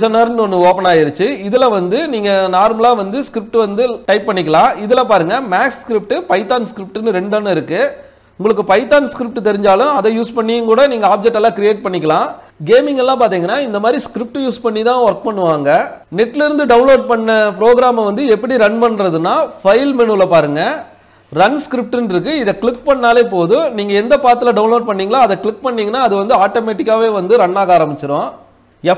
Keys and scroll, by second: 0.3 F11.